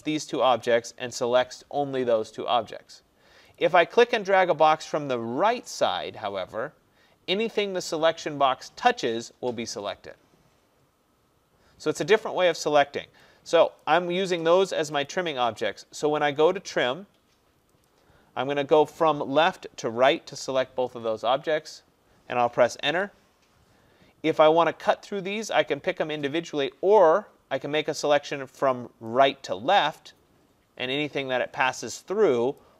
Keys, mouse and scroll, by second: 0.9 click, 3.6 click, 9.1 click, 12.7 click, 13.8 click, 22.9 Return, 32.6 click.